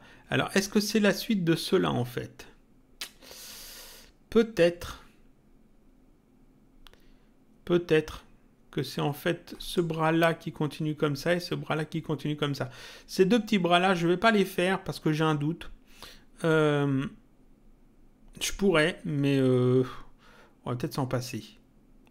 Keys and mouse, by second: 9.6 click.